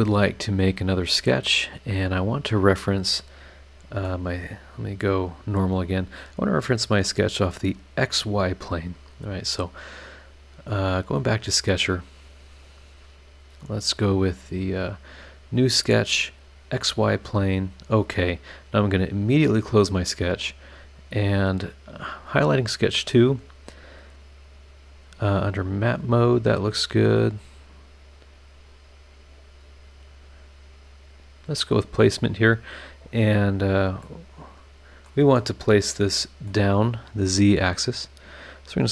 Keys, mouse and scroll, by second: 1.5 scroll down 2, 2.5 click, 3.0-4.2 middle drag, 4.7 click, 10.9 click, 11.6 click, 15.5 click, 17.5 click, 18.8 click, 19.6 click, 20.3 click, 24.9 click, 25.4 click, 28.0 click, 28.6 click, 29.1-29.8 scroll down 2, 29.9-30.3 scroll up 2, 30.3 scroll down 2, 31.9 click, 34.0-35.2 middle drag, 34.1-35.2 drag, 34.1-35.2 right drag, 35.4-36.7 middle drag, 35.4-36.7 drag, 35.4-36.7 right drag, 38.3 click.